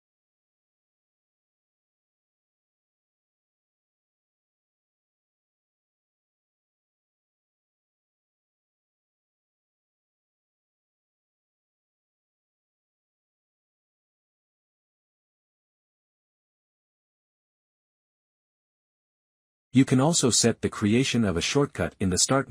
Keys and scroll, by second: 20.7-22.5 typing.